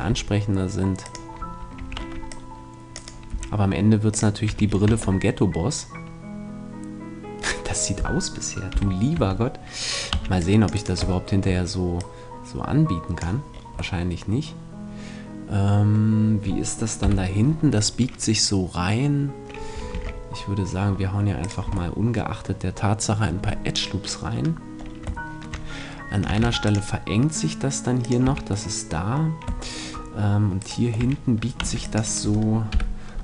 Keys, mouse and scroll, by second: 0.1 s, 1.2-2.9 drag, 1.8 a, 2.1 c, 3.5 s, 4.2 click, 4.5 a, 4.9 Tab, 8.7 KP_3, 9.1 Tab, 10.1 c, 11.2 middle click, 11.9-13.2 drag, 13.7 click, 13.7-16.1 middle drag, 17.0 KP_7, 19.9 ctrl+r, 21.5-23.4 drag, 21.7 a, 23.4 middle click, 24.7-26.1 middle drag, 26.4 ctrl+r, 28.1-29.8 drag, 28.3 a, 30.6-32.3 right drag, 31.0 a, 31.6 c, 32.3-33.2 middle drag, 32.7 KP_7.